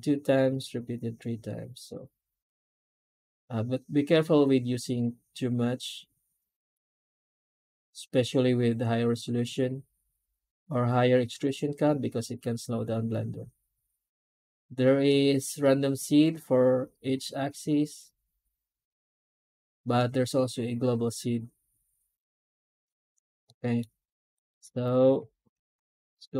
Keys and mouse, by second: 23.3-23.7 middle drag, 24.2 right click, 25.4 alt+h, 25.8-26.3 right drag.